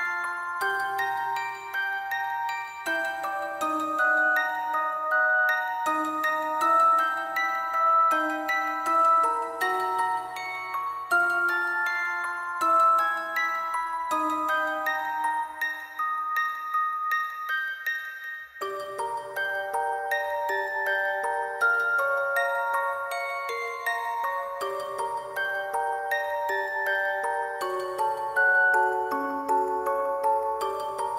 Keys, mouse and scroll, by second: 0.2 alt+click, 1.4 alt+click, 7.8 alt+click, 8.1 shift+click, 8.2 alt+click, 9.6 typing, 9.8 Return, 12.7 double click, 14.2 double click, 18.4 alt+click, 18.6 shift+click, 18.7 alt+click, 25.5 alt+click, 25.6 alt+click, 25.7 shift+click, 25.8 alt+click, 27.0 double click.